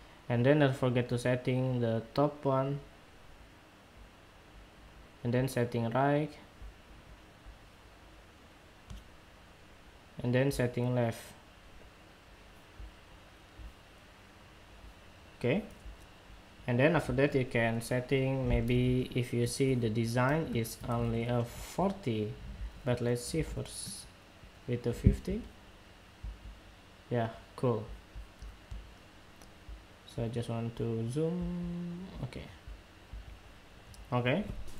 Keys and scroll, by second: 18.5 super+Tab, 20.7 super+Tab.